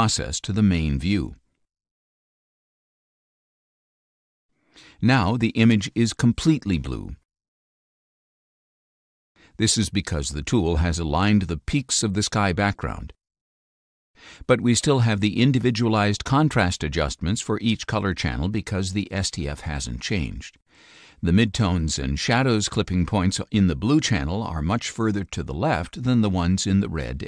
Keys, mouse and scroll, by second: 7.1-8.3 drag, 10.9 click, 14.7 click, 16.2 click, 17.2 click, 19.8 click.